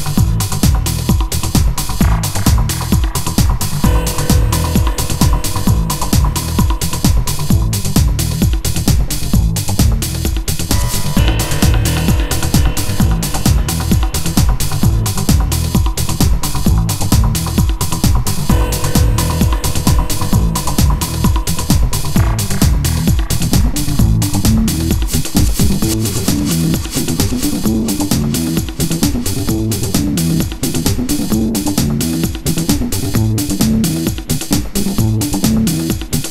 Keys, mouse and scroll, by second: 1.4 ctrl+r, 8.7 a, 9.0 b, 9.7 b, 10.6-12.0 drag, 11.0 a, 12.0 b, 13.0-14.4 drag, 13.8 a, 14.4 b, 15.8-16.6 drag, 16.6 a, 17.1 b, 18.5-19.4 drag, 18.9 b, 20.1 a, 20.4 b, 22.2-22.8 drag, 22.8 Tab, 24.1 shift+d, 28.5 Tab, 30.6-31.7 drag, 34.2 x, 35.9 Tab.